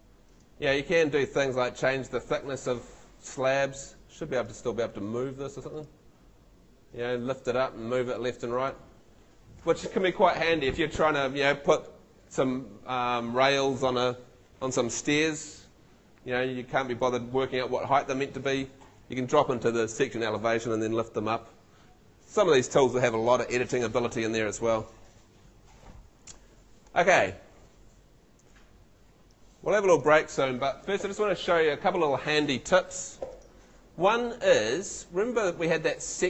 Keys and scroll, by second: 26.3 BackSpace, 35.5 Escape.